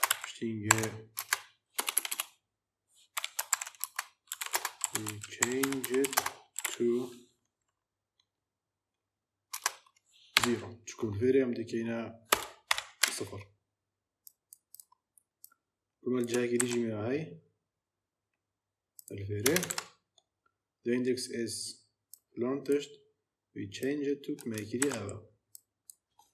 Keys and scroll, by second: 0.0-1.6 typing, 3.0-7.0 typing, 9.4 space, 10.2 =, 12.2 BackSpace, 12.5 0, 16.4 ctrl+c, 19.3 Return, 19.6 ctrl+v, 24.7 ctrl+c.